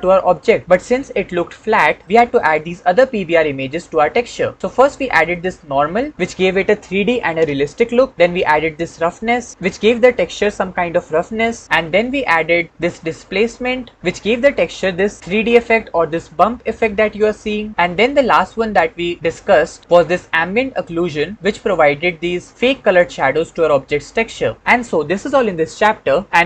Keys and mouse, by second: 4.9 shift+click, 11.9 shift+click, 18.7-19.8 shift+drag, 20.0-21.3 shift+drag.